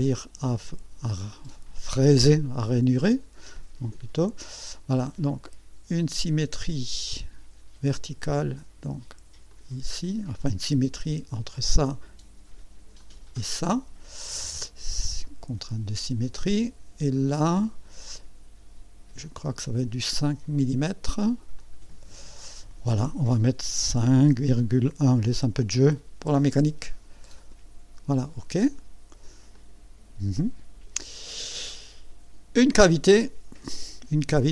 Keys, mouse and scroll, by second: 0.0 click, 2.0 click, 2.9-3.2 scroll up 1, 3.5 right click, 4.5 right click, 6.5 click, 9.5 click, 11.5 click, 13.0 click, 15.2 click, 17.4 scroll down 1, 19.2 click, 21.6 click, 24.2 KP_5, 24.6 KP_Decimal, 26.2 KP_1, 27.4 click, 29.5 click, 30.3 click, 31.2-31.5 scroll up 1, 31.7 right click, 33.1 click.